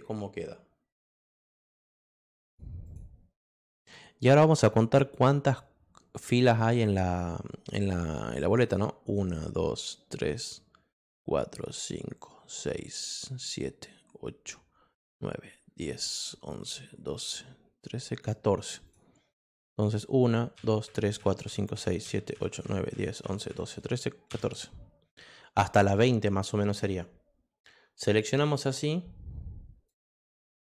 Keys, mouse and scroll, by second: 1.2 click, 1.7 click, 2.4 click, 2.8 click, 18.8 click, 19.4 click, 27.5 click, 29.3 click.